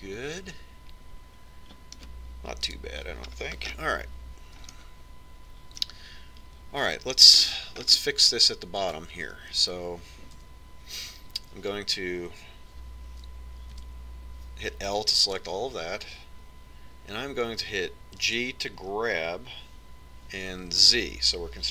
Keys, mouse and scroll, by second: 4.1 KP_1, 5.0-7.3 middle drag, 7.6 middle click, 8.8-11.3 middle drag, 11.8 Tab, 15.3 l, 19.8 g.